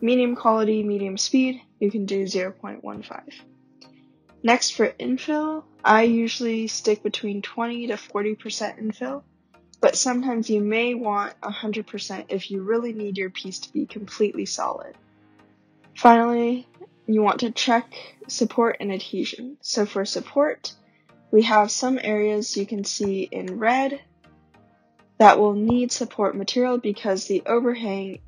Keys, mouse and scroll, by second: 6.9 click, 8.0 click, 9.8 click, 16.8 scroll, 20.6-21.8 scroll, 21.8-22.4 scroll, 23.0-23.4 scroll, 23.7 scroll.